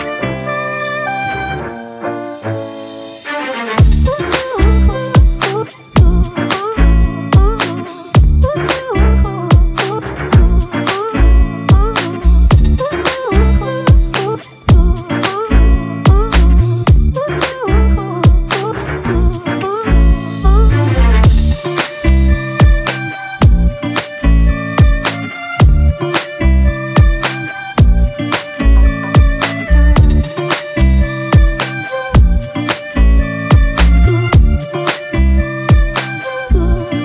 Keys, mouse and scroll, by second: 15.7-16.5 typing.